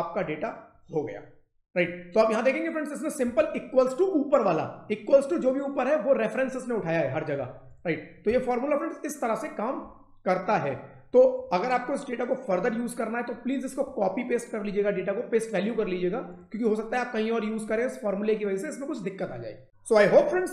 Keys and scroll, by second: 3.1 F2, 7.2 Escape, 8.2 F2, 9.7 Escape.